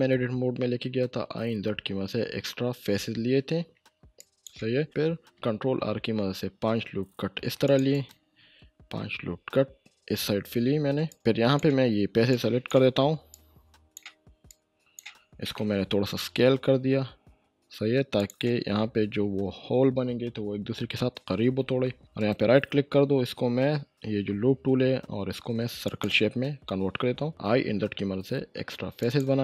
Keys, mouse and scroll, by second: 4.2 click, 5.3 ctrl+r, 6.1-7.7 scroll up 1, 7.7 click, 7.9 right click, 8.8 ctrl+r, 9.5-11.1 scroll up 1, 11.1-11.7 click, 12.3-12.9 shift+drag, 16.1 s, 18.2 s, 18.2 click, 22.0 ctrl+shift+z, 22.2 right click, 25.8 right click, 25.8 click, 27.3 i, 29.0 click.